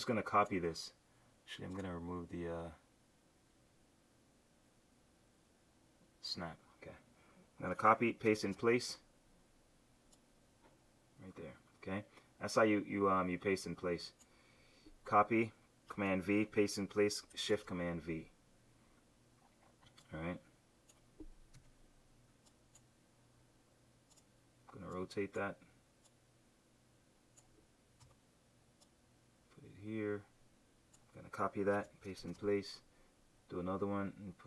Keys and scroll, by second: 7.8 super+c, 8.4 shift+super+v, 17.5 shift+super+v, 21.5 q, 28.0 v, 31.8 super+c, 32.3 shift+super+v.